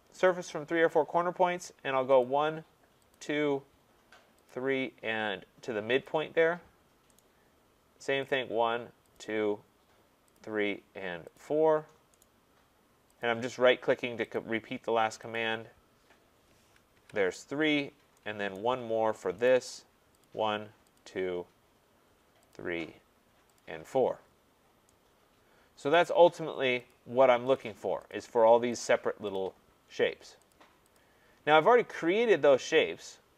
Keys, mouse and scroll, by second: 0.4 click, 0.9 scroll down 2, 2.2 click, 3.1 click, 4.5 click, 6.1 click, 7.2 right click, 8.3 click, 9.2 click, 10.4 click, 11.3 click, 12.2 right click, 13.2 click, 14.4 click, 15.4 click, 17.0 Return, 17.8-18.2 scroll, 18.6 right click, 18.9-19.5 scroll, 19.5 right click, 20.2 click, 21.0 click, 22.5 click, 23.6 click, 24.3 scroll, 25.9 scroll down 3, 25.9 right click, 26.9 click, 27.6 click, 28.1 click, 28.8 click, 29.4 click, 30.5 click, 31.0 click.